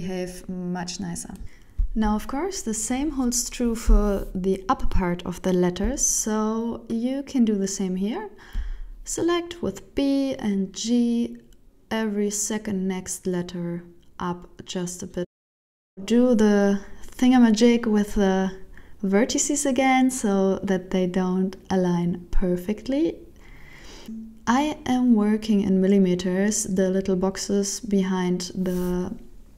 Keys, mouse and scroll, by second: 0.6 b, 1.7 scroll up 6, 2.0 scroll down 4, 2.3 middle click, 3.1 KP_1, 4.1 alt+a, 4.7 b, 6.4 g, 10.3 shift+middle click, 10.7 Tab, 11.1 middle click, 12.8 alt+a, 13.6 alt+z, 14.2 n, 14.5 b, 15.9 g, 18.0 shift+middle click, 18.4 middle click, 18.7 Tab, 19.6 alt+z, 19.9 middle click, 21.2 shift+middle click, 21.9 right click, 22.2 Tab, 22.7 middle click, 23.7 alt+z, 24.1 alt+a, 25.0 b, 26.5 g, 28.3 shift+middle click, 28.8 Tab, 29.1 right click, 29.4 Tab.